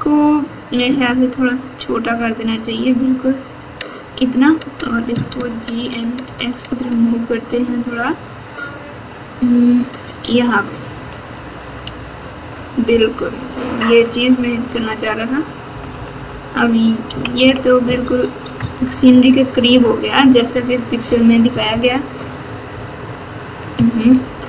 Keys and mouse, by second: 1.0 s, 4.8 g, 11.3 Tab, 11.8 Tab, 13.2 KP_8, 15.6-17.3 typing, 18.5 KP_Add, 18.7 KP_Add, 18.9 KP_Add, 19.0 KP_Add, 19.7 KP_8, 21.0 KP_4, 21.6-22.5 ctrl+KP_4, 22.7 KP_4, 23.9 ctrl+KP_8, 24.2 ctrl+KP_8.